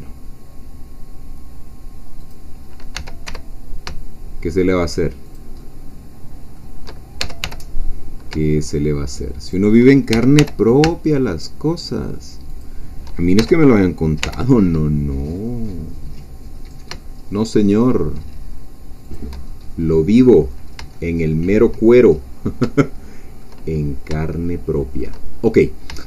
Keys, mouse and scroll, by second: 2.2 click, 2.9 e, 3.3 y, 5.3 shift+click, 5.6-6.9 shift+middle drag, 7.2 shift+e, 7.4 shift+y, 9.4 shift+click, 10.1 shift+e, 10.3 shift+y, 12.5 shift+click, 13.4 shift+e, 14.2 y, 19.0 shift+click, 19.5-20.7 shift+scroll down 1, 20.7 shift+scroll down 1, 20.8 shift+middle click, 20.9-22.0 shift+middle drag, 22.0-22.5 shift+scroll up 2, 22.8 shift+middle click, 23.7 shift+scroll down 1, 24.2-25.3 shift+middle drag, 25.3-25.8 shift+scroll up 1.